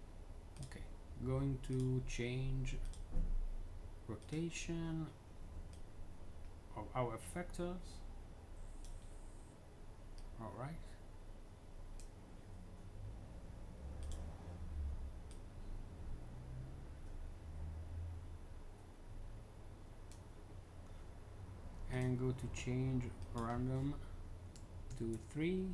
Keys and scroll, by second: 24.8 3, 25.0 Tab.